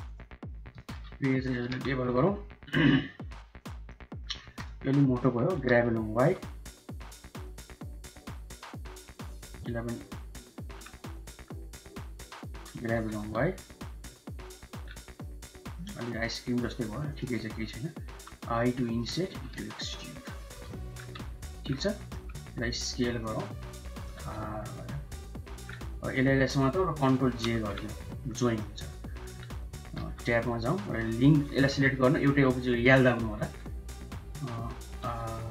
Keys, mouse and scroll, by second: 0.6 shift+click, 1.5 ctrl+b, 3.7 click, 3.9 middle click, 4.2 3, 4.8 middle click, 5.4 g, 10.2 click, 12.8 g, 14.0 middle click, 14.1 click, 15.0 click, 15.3 middle click, 15.6 shift+middle click, 16.0 click, 16.0 middle click, 16.5 click, 16.5 middle click, 18.0 i, 18.5 shift+middle click, 19.2 e, 19.4 shift+middle click, 20.5 click, 20.8 Tab, 21.3 drag, 21.8 right click, 22.5 s, 23.8 r, 25.9 shift+click, 27.3 ctrl+j, 27.7 drag, 28.2 drag, 28.4-29.0 middle drag, 29.9 Tab, 30.6-31.8 middle drag, 31.3 l, 31.8 shift+click, 33.1 g, 34.9 r.